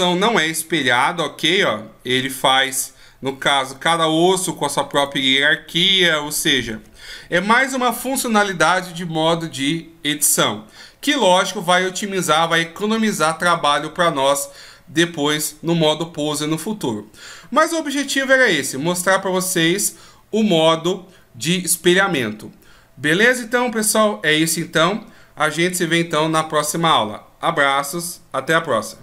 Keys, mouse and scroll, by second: 0.0 g, 2.2 right click, 2.9 g, 4.5 right click, 5.2 g.